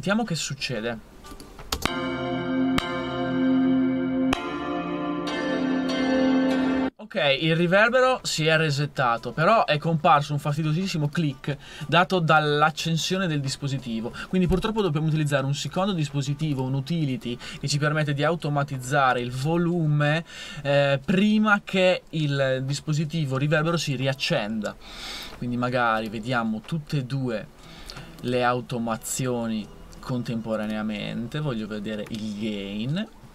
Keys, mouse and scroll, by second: 1.7 space, 6.5 space.